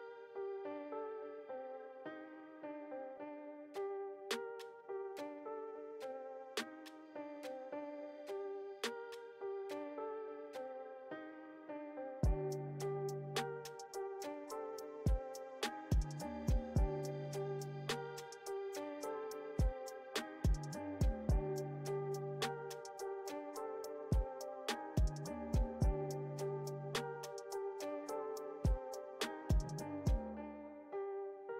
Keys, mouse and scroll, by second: 0.2-1.9 middle drag, 1.9 shift+c, 2.5 f, 3.2-5.4 drag, 5.4 middle click, 5.9 shift+click, 6.3 shift+middle click, 7.1 f, 7.7-9.6 drag, 9.6 middle click, 10.2-13.4 drag, 13.4-14.6 middle drag, 14.6-17.8 drag, 17.8 shift+c, 18.5 f, 19.5 middle click, 20.1 f, 20.9-22.4 drag, 22.4 middle click, 23.1-25.9 drag, 25.9 shift+middle click, 26.6-31.5 drag.